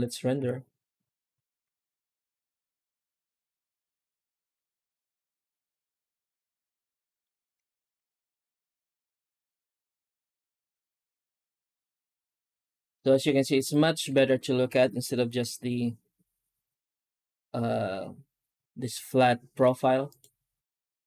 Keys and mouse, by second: 0.3 s, 1.6 ctrl+s, 1.8 z, 4.2 alt+shift+z, 4.5 alt+shift+z, 4.8-5.2 middle drag, 6.8 middle drag, 7.5 shift+middle drag, 8.1 middle drag, 9.7 shift+middle click, 11.5 z, 13.4 right click, 14.0 z, 15.3 h, 19.4 z.